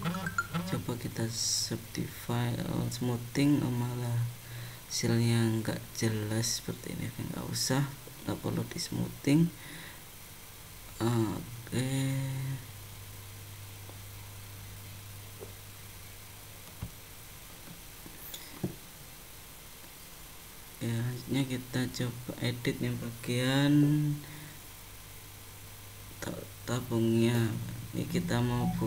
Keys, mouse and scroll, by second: 0.3 right click, 2.3 middle click, 7.3 middle click, 8.9 ctrl+z, 9.5 middle click, 11.1 middle click, 14.3 click, 14.9 click, 16.7 scroll down 1, 17.6 click.